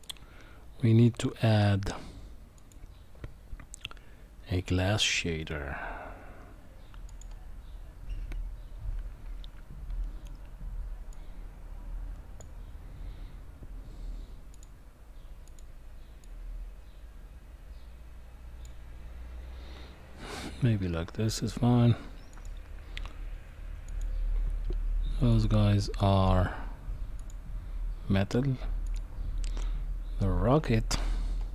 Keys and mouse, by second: 0.0-7.2 drag, 11.1-12.4 drag, 23.9 click, 25.4-27.3 drag.